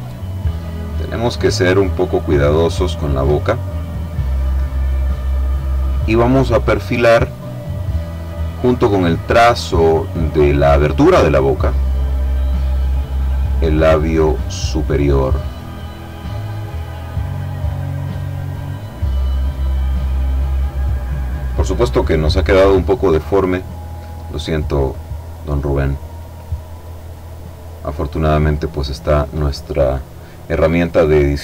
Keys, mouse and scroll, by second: 0.7 click, 2.3 click, 8.2-10.6 drag, 10.7 click, 13.5-15.4 drag, 16.6 click, 19.1 click, 21.2 click, 23.4 click, 24.7 click, 26.2 click, 30.5 click.